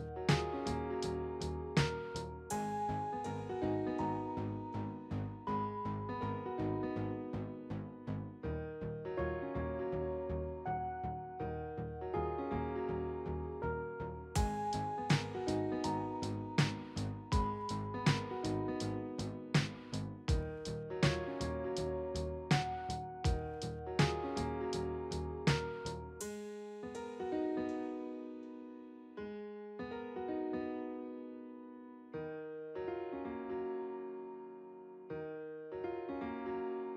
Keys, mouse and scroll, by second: 17.3 double click.